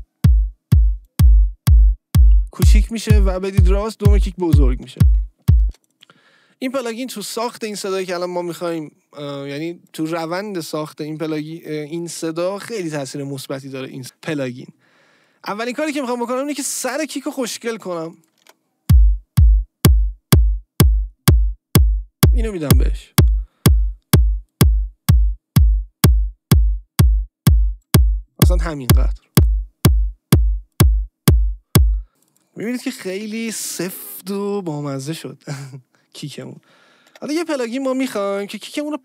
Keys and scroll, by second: 5.6 space, 18.3 space, 37.1 BackSpace.